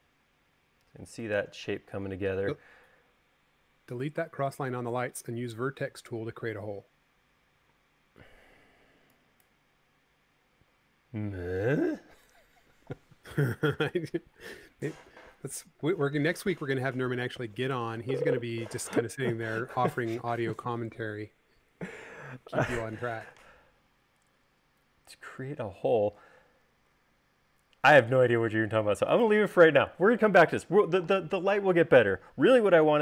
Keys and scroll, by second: 6.0 u, 7.9 e, 27.6 l, 30.4 space.